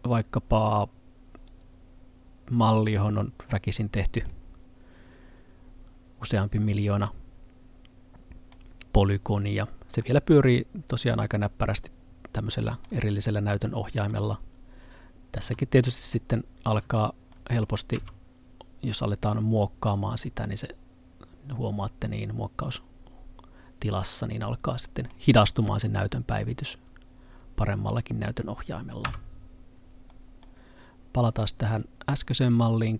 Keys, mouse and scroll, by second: 4.3 middle click, 9.4 scroll up 1, 9.7 scroll down 1, 10.1 middle click, 15.4 z, 16.0 middle click, 16.9 z, 17.4 middle click, 18.0 Tab, 20.3 middle click, 29.1 Tab, 30.2 middle click, 31.3 click.